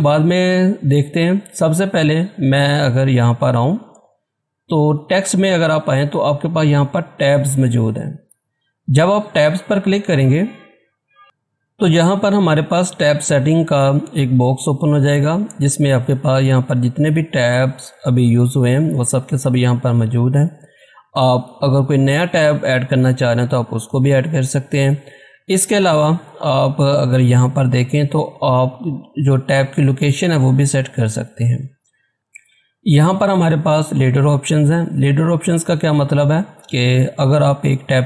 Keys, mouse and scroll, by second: 1.4-2.6 scroll down 1, 3.2 scroll up 1, 5.0 click, 9.2 click, 9.3 click, 34.1 click.